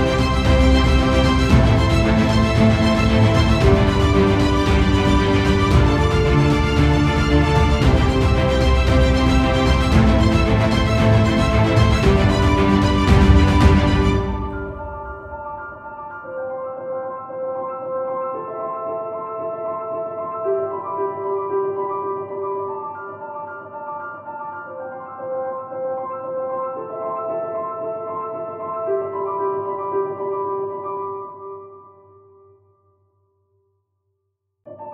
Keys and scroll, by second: 0.0 ctrl+0, 2.7 ctrl+0, 3.0 ctrl+=, 4.0 ctrl+space, 26.8 ctrl+space, 27.4 ctrl+0.